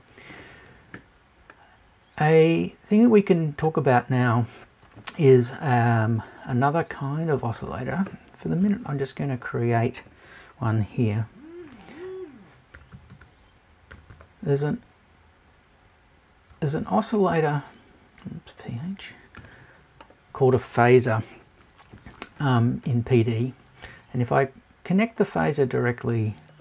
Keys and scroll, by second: 8.6 BackSpace.